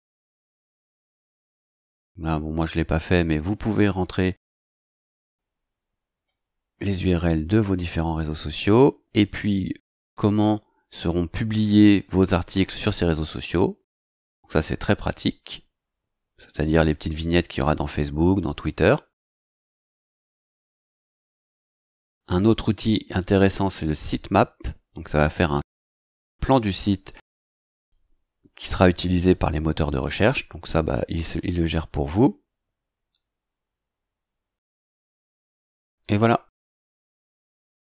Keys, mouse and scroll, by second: 6.8-7.5 scroll down 1, 7.5-7.8 scroll up 2, 8.6 click, 13.0 scroll down 2, 15.1-15.9 scroll down 2, 16.4 scroll down 2, 17.0-18.2 scroll up 6, 20.3-20.6 scroll down 2, 23.2 click, 30.4 scroll down 2, 30.9-31.2 scroll down 2, 32.5 scroll down 2.